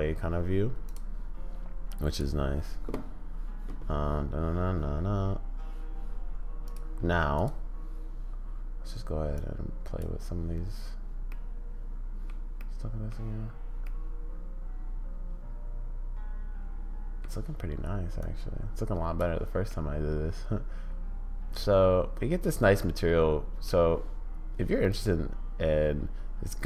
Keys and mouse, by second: 2.1 click, 6.6 click, 9.5 click, 11.3-12.2 middle drag, 12.6-13.1 middle drag, 13.8-17.2 middle drag, 18.3 click, 19.7-23.6 middle drag, 24.8-26.6 middle drag.